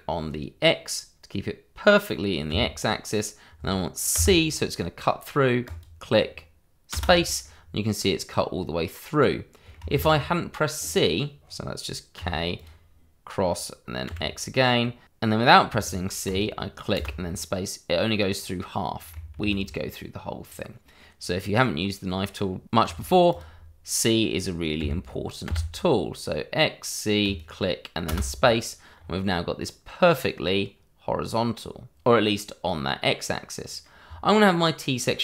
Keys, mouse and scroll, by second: 2.5 x, 5.3 c, 5.6 click, 6.9 space, 7.4 middle click, 9.9 ctrl+z, 10.7 click, 12.1 k, 12.5 click, 14.0 x, 16.2 click, 16.9 space, 17.2 middle click, 19.4 ctrl+z, 20.4 click, 22.8 k, 23.3 click, 24.8 x, 25.4 c, 27.2 click, 28.0 space, 28.9 scroll up 1, 29.6 middle click, 34.0 scroll down 1, 34.4 middle click.